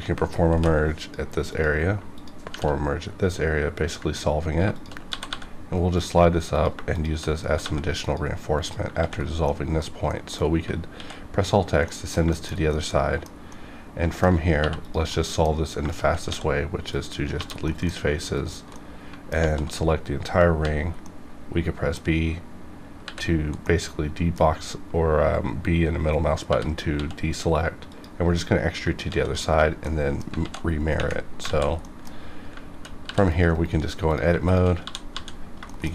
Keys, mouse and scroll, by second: 0.5 m, 0.9 click, 2.1 shift+click, 2.1 shift+click, 2.4 shift+r, 4.7 shift+click, 5.1 g, 5.2 g, 5.9 click, 6.8 shift+click, 6.9 shift+click, 7.4 g, 7.6 g, 7.9 click, 8.0 click, 8.9 ctrl+x, 9.1-9.4 scroll down 2, 9.4-10.1 middle drag, 10.8 alt+x, 11.8 middle click, 12.2-12.5 scroll down 2, 12.3 shift+middle click, 12.7 middle click, 13.5 scroll up 1, 14.6 3, 14.8 click, 15.1 middle click, 15.1 scroll down 1, 15.8 shift+click, 16.2 x, 16.8 click, 17.3 1, 17.7 middle click, 18.3 alt+click, 18.7 middle click, 19.3 z, 19.8-20.6 scroll down 1, 20.6 b, 21.0-23.0 middle drag, 23.0 b, 23.6-26.4 middle drag, 26.4-26.9 typing, 27.9 click, 29.0 alt+x, 29.8 middle click, 30.4 alt+x, 31.4 alt+z, 31.8 middle click, 32.1 scroll up 1, 33.2 ctrl+r, 33.3 click, 33.4 right click, 34.0 click, 34.4 shift+click, 34.8 f, 35.1 f, 35.4 scroll down 1, 35.6 shift+middle click.